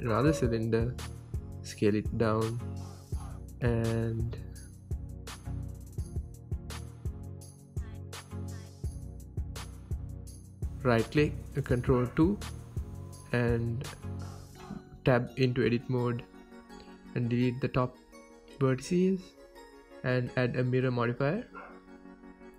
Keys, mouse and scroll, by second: 2.2 s, 2.8 right click, 3.1 g, 3.7 click, 4.1 s, 6.7 click, 6.9 scroll up 1, 7.4 s, 8.7 click, 8.8 scroll up 1, 9.0 g, 10.3 click, 10.5-12.2 middle drag, 10.7 scroll up 1, 11.5 Tab, 12.4 ctrl+2, 13.6 ctrl+z, 14.0 Tab, 14.5 ctrl+2, 14.8 shift+middle click, 15.0 Tab, 15.7 ctrl+r, 16.0 right click, 16.8-19.0 middle drag, 19.1 click, 19.4-22.4 middle drag, 19.8 x, 21.1 ctrl+z, 21.5 x, 21.9 Tab, 22.4-22.5 drag.